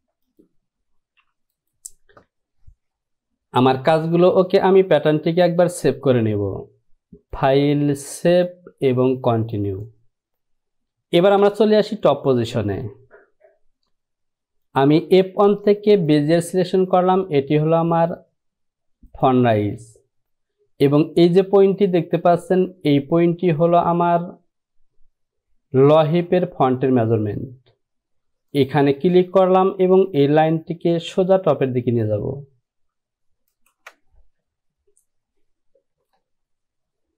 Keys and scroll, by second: 10.3 Home, 11.4 Return.